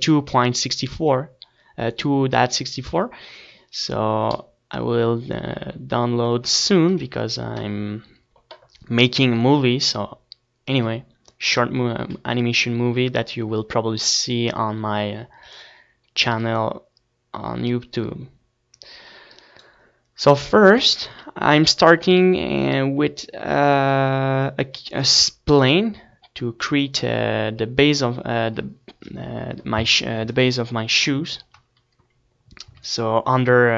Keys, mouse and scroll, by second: 7.3 KP_1, 14.7-17.2 middle drag, 17.2 shift+a, 22.2 KP_7, 23.2 shift+a, 27.2-28.3 middle drag, 28.7 Tab.